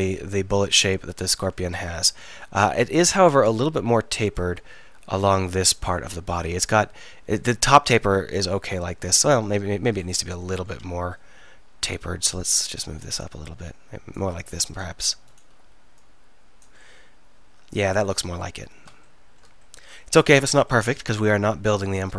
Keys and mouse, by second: 10.0-11.7 right drag, 11.7 click, 14.4-16.0 drag, 17.0 middle click, 17.2 click.